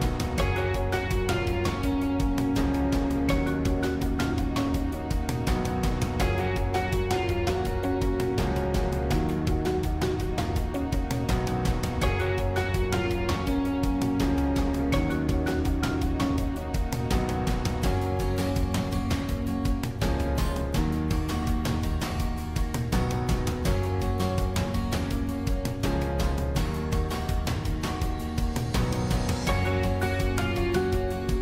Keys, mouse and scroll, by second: 0.0-13.0 drag, 13.0 scroll down 1, 13.3-14.6 middle drag, 14.6 click, 15.0-16.0 middle drag, 16.0 scroll down 1, 16.1-21.6 middle drag, 21.6 click, 23.3 click, 25.4 g, 27.4 click, 27.9-31.3 middle drag, 31.3 c.